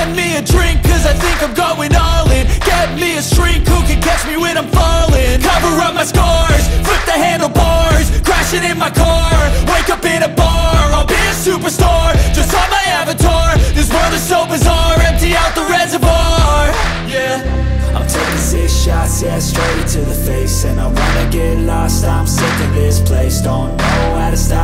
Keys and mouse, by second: 1.5 click, 2.6-3.6 drag, 4.3 click, 5.9 g, 17.8 click, 18.5 click, 20.1 g.